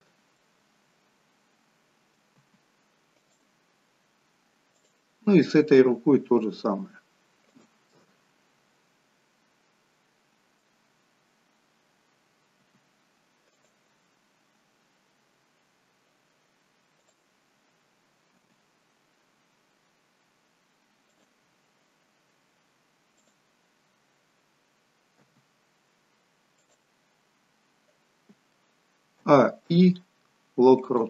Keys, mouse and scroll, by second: 0.5 middle click, 2.3 r, 4.7 click, 5.8 g, 7.8 middle click, 12.6 r, 17.0 click, 18.2 g, 23.2 click, 25.3 r, 29.3 a, 29.7 i.